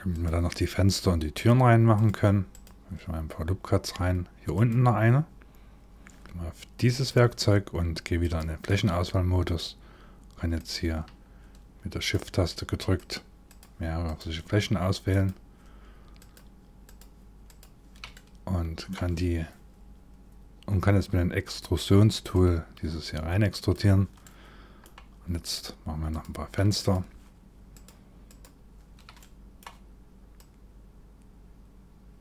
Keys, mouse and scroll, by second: 0.9 click, 1.6 click, 6.2 click, 6.2 scroll down 2, 6.6 click, 7.8 click, 10.1 click, 11.6 shift+click, 12.6 shift+click, 13.1 shift+click, 13.7 click, 14.7 click, 16.4 shift+click, 17.1 shift+click, 17.7 middle click, 20.5 click, 22.0 click, 23.8 middle click, 25.7 click, 26.4 shift+click, 27.3 click, 27.9 shift+click, 28.8 middle click, 30.0 click.